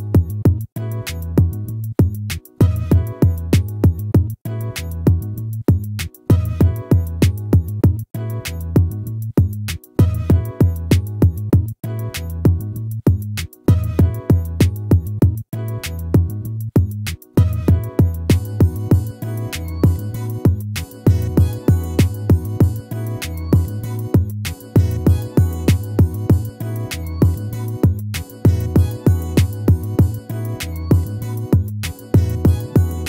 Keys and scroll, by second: 25.0 ctrl++, 29.3 ctrl++.